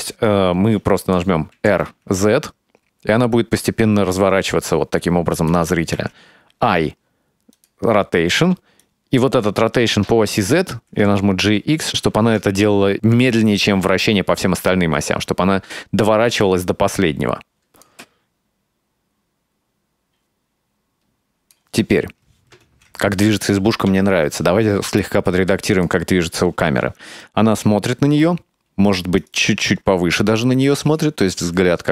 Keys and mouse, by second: 1.6 r, 6.0 i, 8.8-9.2 right drag, 10.3 g, 11.6 right drag, 12.0 s, 14.4-17.9 drag, 17.9 space, 21.4 click, 22.7 ctrl+s, 27.2-29.0 drag, 29.2 right click, 30.7 g.